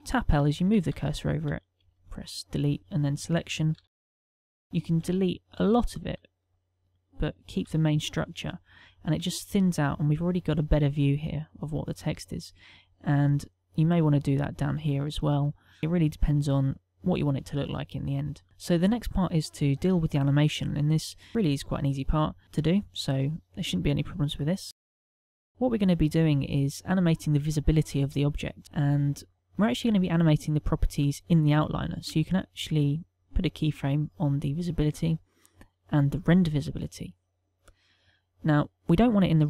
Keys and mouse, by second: 0.0-1.0 typing, 1.7 Delete, 3.7-4.6 typing, 4.9 Delete, 6.0 ctrl+middle click, 6.5 middle click, 7.6 Tab, 8.0 middle click, 8.6 ctrl+middle click, 8.9 shift+middle click, 9.3 middle click, 12.2 middle click, 15.2 middle click, 17.6 middle click, 18.4 a, 33.4 click, 34.0 click, 34.4 click, 34.7 click, 35.6 click, 36.0 click.